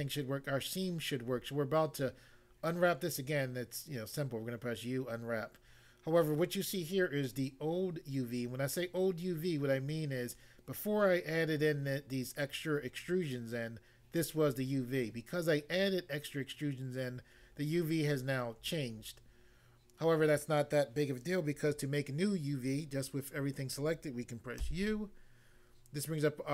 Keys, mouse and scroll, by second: 24.6 u.